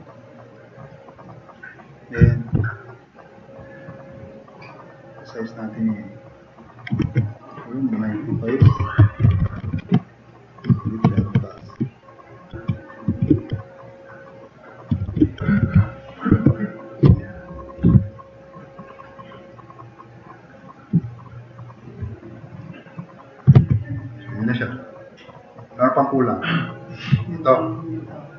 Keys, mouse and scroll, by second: 7.0 ctrl+z, 8.4-10.2 typing, 10.9 shift+Tab, 11.1 shift+Tab, 11.6 shift+Tab, 12.5 9, 13.1 9, 15.0 9, 15.0 9, 15.2 Tab, 15.5 9, 15.6 9, 16.3 Tab, 18.1 click, 19.5 drag, 21.8 Tab, 21.8-22.6 typing, 23.6 alt+q, 23.9-24.6 drag, 24.8 click, 25.2-25.6 drag, 25.8 click.